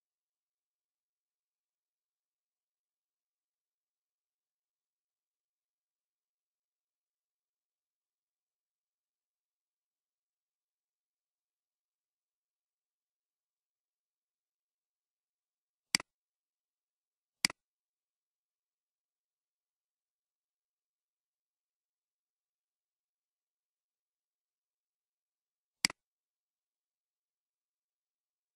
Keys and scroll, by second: 18.1-20.0 typing, 21.5-23.5 typing, 22.0 Return, 24.8-25.6 typing, 26.7 typing.